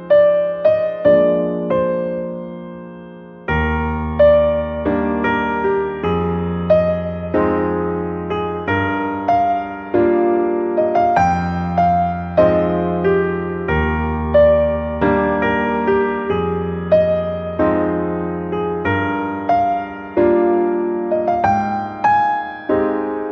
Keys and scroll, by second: 12.0 shift+BackSpace.